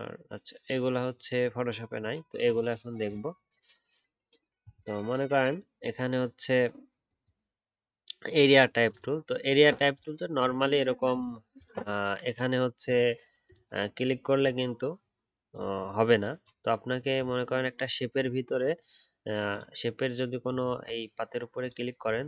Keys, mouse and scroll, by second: 10.3-11.6 alt+scroll up 1, 20.5 alt+scroll up 2, 22.0 alt+scroll down 1.